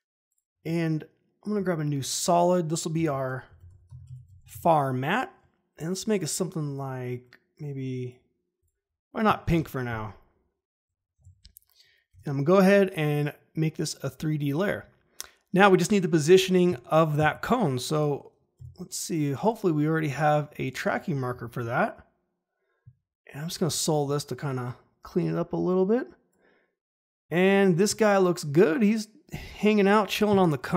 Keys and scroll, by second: 1.5 ctrl+y, 2.9 Caps_Lock, 3.2-5.0 typing, 9.8 Return, 11.1 Caps_Lock, 12.0 F4, 18.5 e, 21.3 ctrl+shift+h.